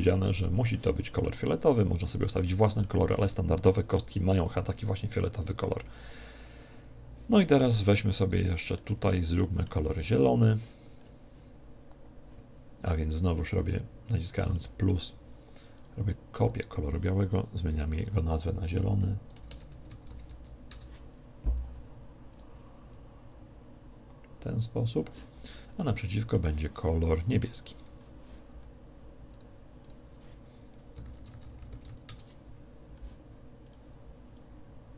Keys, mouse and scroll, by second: 1.2-2.9 middle drag, 3.2-5.6 middle drag, 8.3 right click, 8.8-11.7 middle drag, 14.6-16.1 middle drag, 15.8 click, 22.3 click, 25.8-28.3 middle drag, 27.8 right click, 29.3-31.5 drag, 33.6 click.